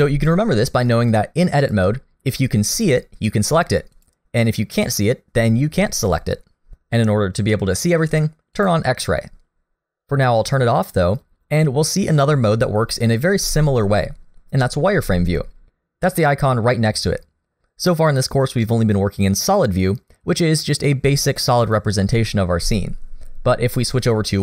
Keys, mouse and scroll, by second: 1.6 click, 2.8 click, 4.0 click, 4.8 click, 8.6 click, 9.8 click.